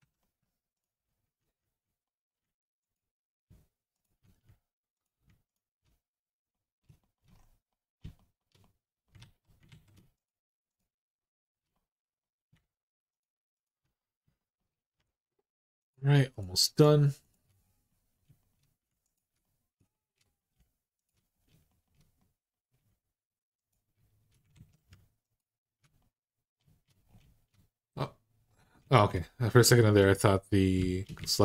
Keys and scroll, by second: 9.0 alt+z, 9.5 alt+z, 24.3 ctrl+z, 31.0 alt+z.